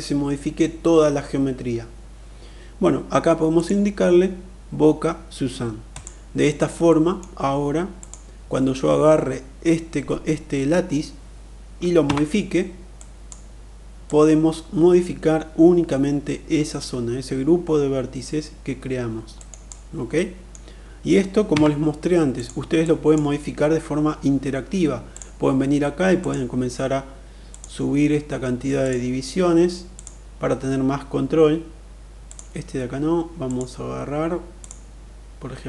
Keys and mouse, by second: 3.1-5.6 drag, 6.4 middle click, 11.5 Tab, 12.6 click, 13.6-19.1 drag, 18.9 right click, 19.6 middle click, 20.9 Tab, 21.7 click, 22.2-22.6 drag, 24.5 click, 25.5 click, 26.9 click, 28.3 click, 29.3 click, 31.6 click, 32.9 click, 34.1 click.